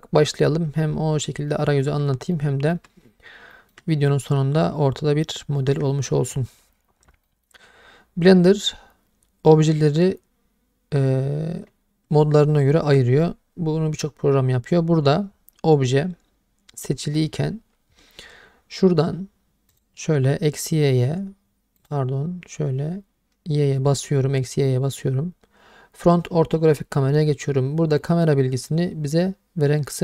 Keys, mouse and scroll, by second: 1.5-1.8 middle drag, 2.3-2.7 ctrl+middle drag, 3.5 shift+middle click, 4.3-5.2 middle drag, 5.6 shift+middle click, 7.3 middle drag, 19.7 click, 21.8 click.